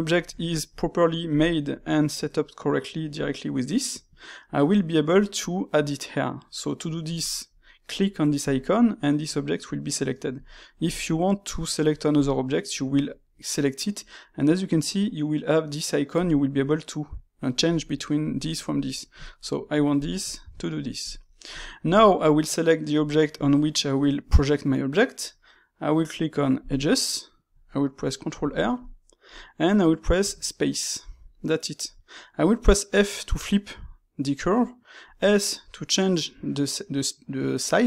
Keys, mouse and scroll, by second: 0.1-3.1 ctrl+shift+middle drag, 3.1-6.1 drag, 8.4 click, 10.4-12.1 shift+middle drag, 12.1 click, 16.1-19.1 drag, 19.8 click, 20.3-20.9 shift+middle drag, 20.9 click, 21.2-26.5 middle drag, 26.5-28.3 drag, 28.3 ctrl+r.